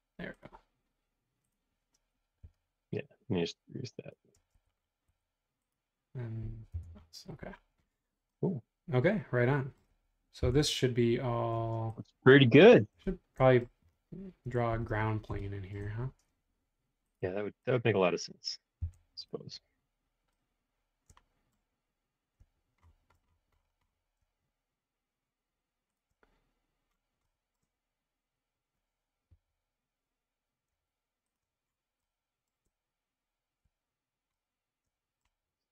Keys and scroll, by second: 2.4 e, 4.4 space, 5.0 Escape, 6.7 BackSpace, 7.3 o, 10.4 l, 11.5 space, 14.7 super+1, 18.8 l, 29.3 Left.